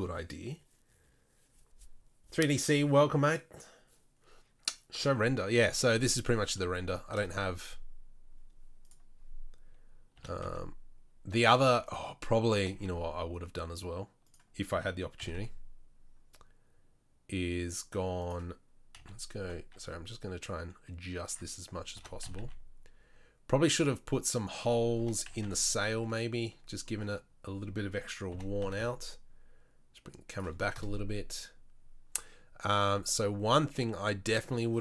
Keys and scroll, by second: 7.3 KP_0, 10.3 r, 12.9 r, 14.9 r, 19.2 f, 19.7 g, 22.3 r, 25.2 g, 28.5 g, 31.1 KP_0.